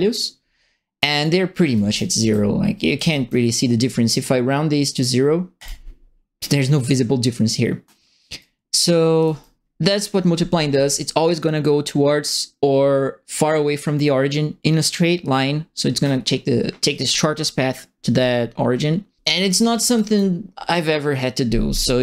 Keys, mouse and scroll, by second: 1.2-3.2 right drag, 1.4-2.9 typing, 5.5 click, 8.3-9.5 right drag, 9.1 d, 18.9-20.3 typing, 19.2 right click.